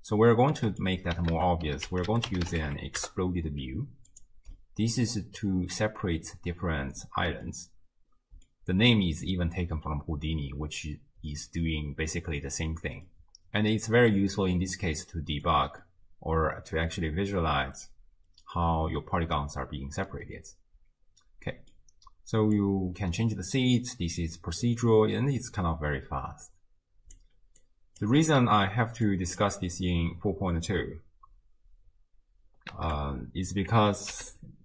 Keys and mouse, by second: 0.7 middle click, 1.3 ctrl+a, 4.6-5.1 middle drag, 7.5-8.5 middle drag, 13.1-15.4 middle drag, 15.8-17.9 middle drag, 20.1-21.7 middle drag, 22.6-27.1 drag, 27.6-28.0 drag, 29.1 drag, 32.7 ctrl+a, 34.4 o.